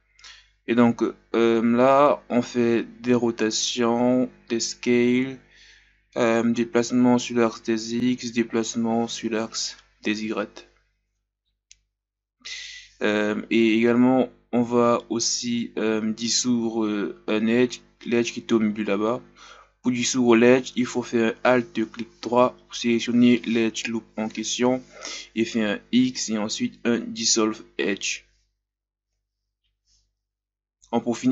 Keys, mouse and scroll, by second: 0.6 scroll down 1, 1.2 r, 1.9-4.7 drag, 6.4 s, 7.3-8.4 drag, 8.4 s, 9.7-10.1 scroll up 2, 10.1-11.9 drag, 11.9-13.3 ctrl+scroll up 6, 13.3 alt+right click, 14.1 x, 15.1-16.9 scroll down 3, 15.2 Tab, 17.9-18.4 scroll up 2, 18.4 Tab, 19.2 alt+right click, 19.6 ctrl+KP_Add, 19.7 ctrl+KP_Add, 20.0 ctrl+KP_Add, 20.4 ctrl+KP_Add, 21.2 ctrl+KP_Subtract, 22.2 shift+right click, 23.8 r, 24.6-26.0 drag, 26.8 click, 27.7-28.0 ctrl+scroll down 1, 28.1 Tab, 28.4 Tab, 28.7 right click, 30.1 Tab, 30.2 scroll down 2, 30.5-31.3 shift+scroll up 1.